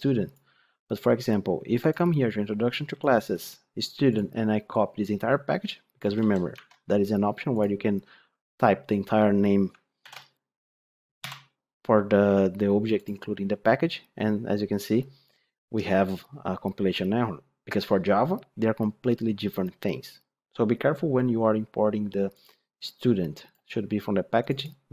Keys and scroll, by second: 6.1 ctrl+c, 6.4 ctrl+Tab, 9.9 ctrl+v.